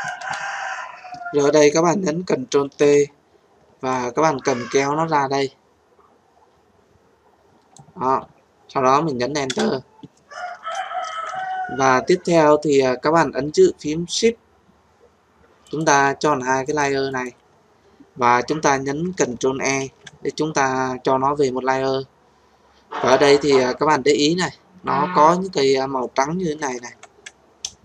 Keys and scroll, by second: 2.6 ctrl+t, 9.4 Return, 19.8 ctrl+e.